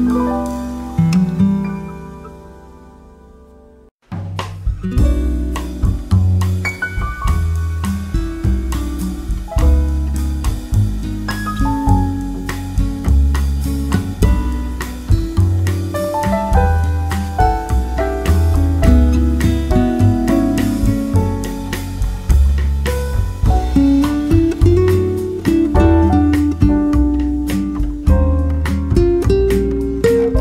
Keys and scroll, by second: 1.3-3.1 typing, 6.1-7.8 typing, 13.4 Left, 15.5 Left, 18.1-19.2 typing, 21.7-24.3 typing, 27.0 n.